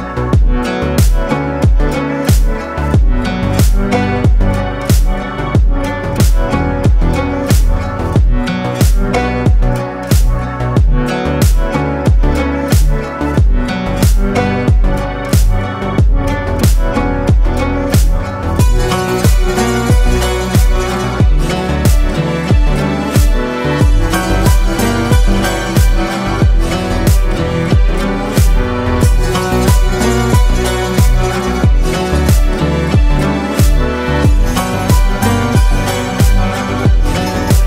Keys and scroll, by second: 0.3 ctrl+space, 4.9 ctrl+space, 5.6 ctrl+space, 13.1 ctrl+space, 25.6 ctrl+space, 32.1 ctrl+shift+space, 32.7 ctrl+shift+space, 33.4 ctrl+shift+space.